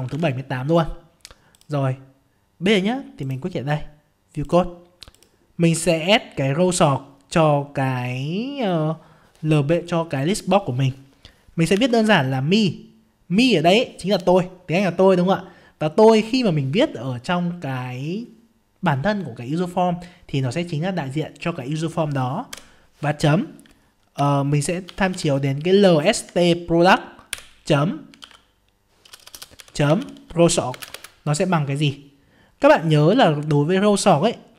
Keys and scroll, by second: 0.1 alt+Tab.